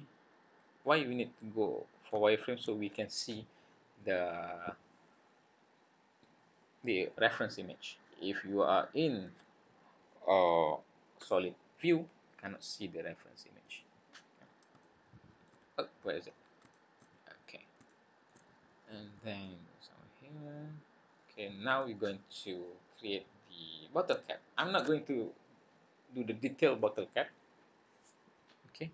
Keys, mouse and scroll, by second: 0.6 scroll down 4, 0.8-2.1 scroll up 6, 2.2 shift+middle click, 7.2-7.7 scroll down 3, 8.6 click, 13.6 click, 14.1-14.6 scroll up 5, 14.8 shift+middle click, 15.8-16.6 scroll down 10, 16.7 shift+middle click, 17.1-17.6 scroll up 9, 17.9 shift+middle click, 18.6-19.2 scroll up 1, 19.4 click, 21.9-23.2 scroll down 10, 23.0-24.1 scroll up 7, 24.2 shift+middle click.